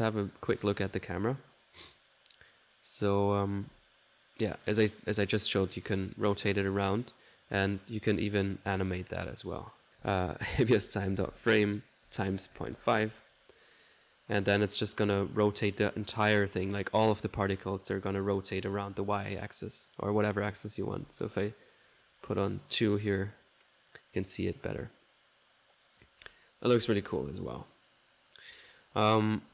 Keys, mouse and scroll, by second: 0.3 middle click, 0.7 click, 3.7-4.9 drag, 5.6-7.8 drag, 8.2-9.9 drag, 26.8 ctrl+z, 27.3 ctrl+click, 28.5 ctrl+click.